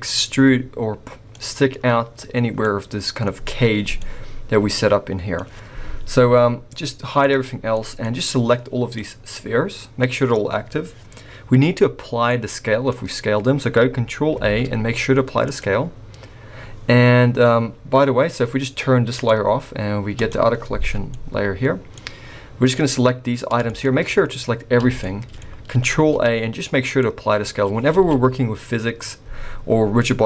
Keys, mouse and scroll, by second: 1.3 middle click, 2.6 middle click, 4.0 middle click, 7.2 click, 7.7 middle click, 8.3 click, 9.2 scroll down 2, 9.3 middle click, 10.3 middle click, 10.3 scroll up 2, 12.1 scroll up 1, 12.5 middle click, 14.3 ctrl+a, 19.1 click, 20.1 click, 20.7-21.6 scroll down 3, 21.1 middle click, 21.9 middle click, 21.9-22.7 scroll up 2, 22.7 click, 24.8 scroll down 3, 24.8 a, 25.0 middle click, 25.9 a, 27.4-27.8 scroll up 3, 27.9 alt+a.